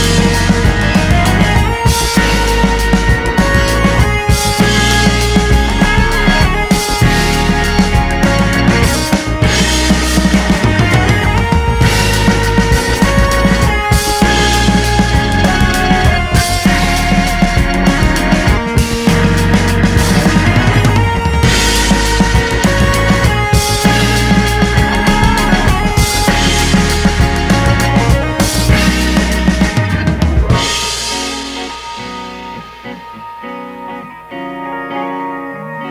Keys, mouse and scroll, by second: 1.4 space, 1.6 middle click, 2.2 click, 3.1-4.1 middle drag, 5.1 click, 5.4-7.9 middle drag, 7.9 shift+d, 9.0 m, 11.0 middle click, 11.9 click, 12.3 middle click, 12.6 ctrl+z, 13.2 click, 13.9-15.6 middle drag, 15.8 middle click, 16.3 KP_1, 16.8 g, 18.7 middle click, 19.2 g, 19.7-22.0 middle drag, 22.0 KP_1, 22.6 middle click, 23.5 g, 24.0-25.4 middle drag, 25.8 middle click, 26.2 g, 26.7 middle click, 27.6 scroll down 1, 27.7-29.1 shift+middle drag, 29.1 shift+d, 30.0 shift+middle click, 30.3 r, 30.7 scroll down 1, 30.9 shift+middle click, 31.1 click, 31.7 right click, 32.0 click, 32.5 right click, 32.6 r.